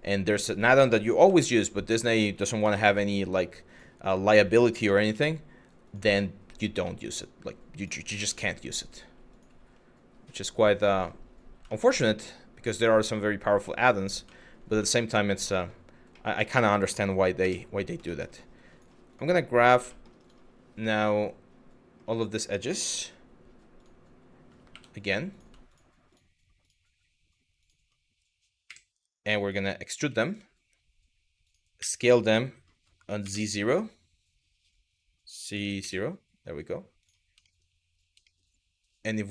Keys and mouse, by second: 0.8 g, 1.0 y, 2.0 click, 2.2 g, 3.3 click, 3.9 click, 4.5 g, 5.5 click, 5.8 middle click, 6.6 middle click, 7.8 KP_1, 9.0 click, 9.2 g, 10.5 click, 11.4 middle click, 12.0 middle click, 13.4 middle click, 14.0 shift+middle click, 14.5 middle click, 15.2 shift+middle click, 15.8 middle click, 17.0 KP_1, 17.7 middle click, 18.1 click, 19.6 middle click, 20.5-21.6 middle drag, 24.3 2, 25.3 click, 27.2 click, 28.3 KP_1, 29.6 e, 31.1 click, 31.4 s, 32.9 z, 35.4 KP_0, 36.6 click, 37.1 shift+middle click, 37.9 shift+middle click.